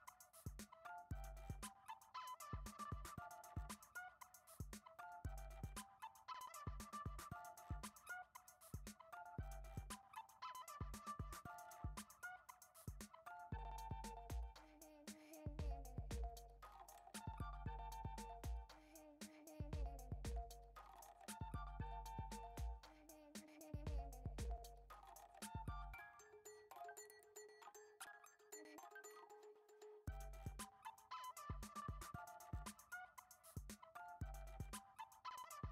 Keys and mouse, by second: 0.6 g, 2.0 middle click, 2.4 alt+z, 2.7 middle click, 3.1 g, 4.2-4.6 middle drag, 4.7 g, 7.4 right click, 8.7-9.4 shift+middle drag, 10.2 shift+a, 12.0 middle click, 12.5 g, 13.9 Tab, 14.3 alt+z, 15.4 KP_1, 16.4 click, 16.9 click, 17.7 x, 18.5 alt+z, 18.9 middle click, 19.5 a, 19.9 s, 21.0 g, 21.8 g, 22.5 g, 23.9 g, 24.7 g, 25.8 shift+middle click, 27.0 alt+e, 29.1 KP_1, 30.0 a, 30.5 g, 32.2 g, 33.1 shift+d, 34.3 r, 35.4-35.7 typing.